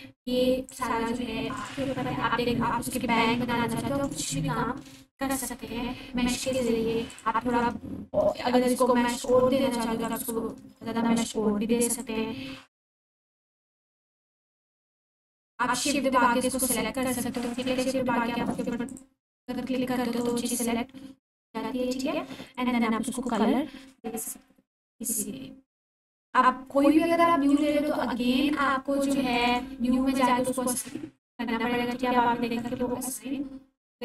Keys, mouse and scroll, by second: 0.7-1.6 ctrl+drag, 9.0 ctrl+z, 10.1-11.0 ctrl+drag, 14.6 ctrl+z, 15.8-16.7 shift+drag, 18.9-20.4 ctrl+drag, 31.1-32.6 alt+drag.